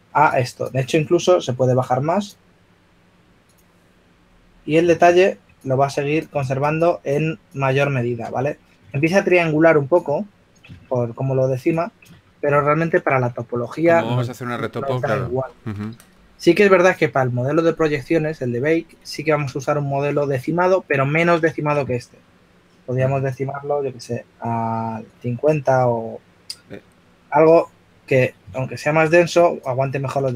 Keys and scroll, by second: 3.0 s, 13.8 shift+f, 21.7 shift+f.